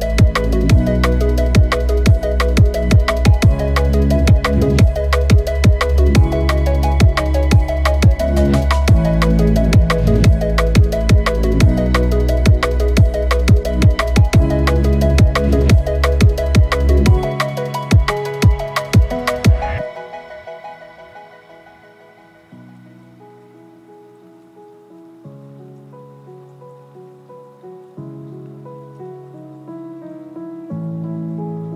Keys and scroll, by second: 1.1 ctrl+alt+shift+e, 4.5 ctrl+shift+F7, 5.1 b, 5.6 ctrl+space, 9.9 ctrl+i, 9.9 ctrl+F11, 14.1 b, 24.1 space, 30.8 space.